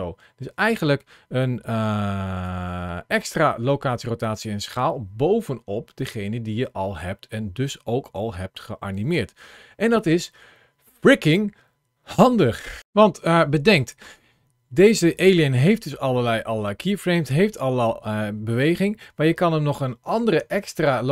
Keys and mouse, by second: 1.7 ctrl+shift+a.